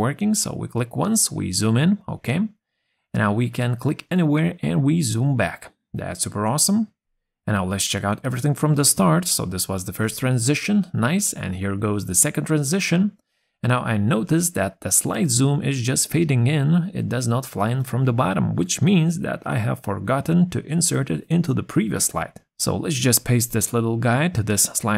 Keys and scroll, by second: 18.1 ctrl+c.